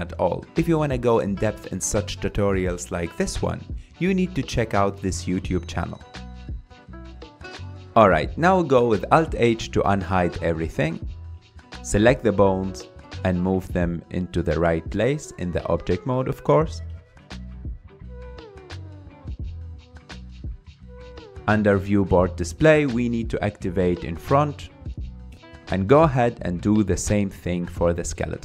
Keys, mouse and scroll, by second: 3.4-4.2 middle drag, 4.2-5.2 scroll up 4, 7.5 click, 7.7-8.1 scroll down 3, 8.1 alt+h, 8.9 click, 9.3-9.8 scroll down 4, 9.8 scroll up 4, 10.2-10.9 shift+middle drag, 10.9 click, 11.6-13.7 middle drag, 13.7 click, 13.9 g, 15.6 KP_7, 16.5 scroll up 2, 17.0-17.4 scroll down 1, 17.4 r, 19.2 middle click, 20.1-20.5 scroll up 4, 20.5 g, 21.0-23.0 middle drag, 23.0 click, 24.4-25.9 scroll down 5, 26.2 click, 27.9 click.